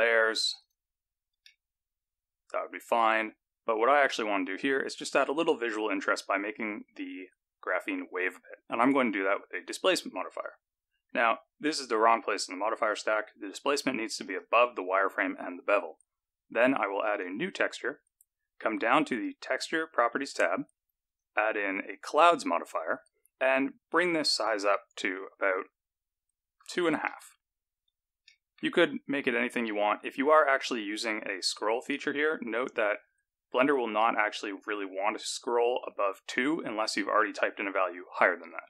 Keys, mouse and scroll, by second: 0.2 click, 1.1 click, 1.4 middle click, 3.9 click, 4.9 middle click, 6.4 click, 12.8 click, 14.2 click, 17.0 click, 20.2 click, 21.0 click, 23.8 click, 28.2 middle click, 28.9 scroll up 3, 31.2 click.